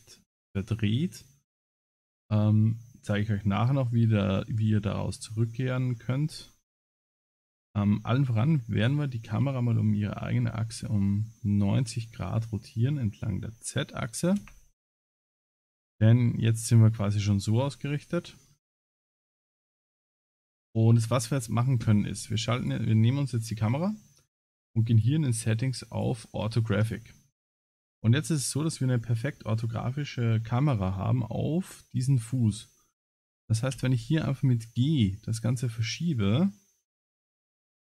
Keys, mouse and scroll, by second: 1.5 middle click, 6.3 KP_0, 6.7 KP_0, 8.4 r, 15.1 KP_0, 16.2 KP_0, 17.8 middle click, 18.3-19.1 scroll down 8, 19.5 click, 20.6 KP_0, 22.6 click, 24.2 click, 27.8 click, 33.7 g.